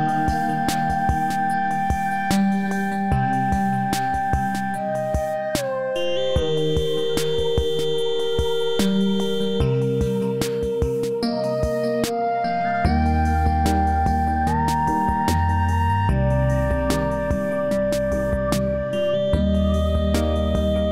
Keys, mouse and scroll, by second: 13.8-14.4 click, 14.7 space, 14.7 click, 16.3-18.2 scroll up 1, 18.8-19.4 click, 19.5-20.2 alt+middle drag.